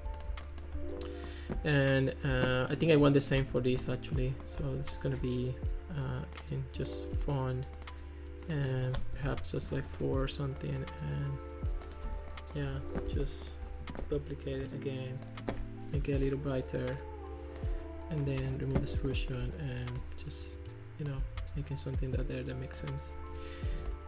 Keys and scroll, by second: 9.2 4, 9.3 Return, 14.0 super+d.